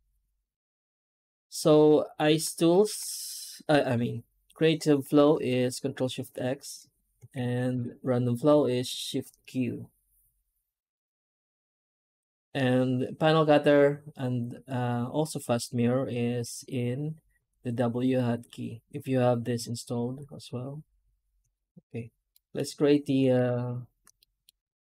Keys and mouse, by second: 0.0 n, 21.3 Tab, 22.3 middle click, 22.4 middle click, 24.0 middle click.